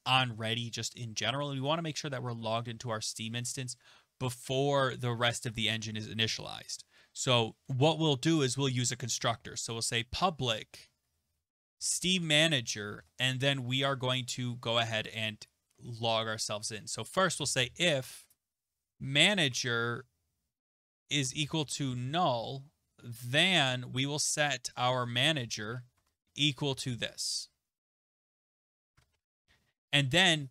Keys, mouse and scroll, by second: 7.1 Return, 7.6 Tab, 8.9-9.8 typing, 10.2 Tab, 11.1-14.2 typing, 17.1-19.7 typing, 20.8-29.6 typing, 23.1 Right, 29.7 Return.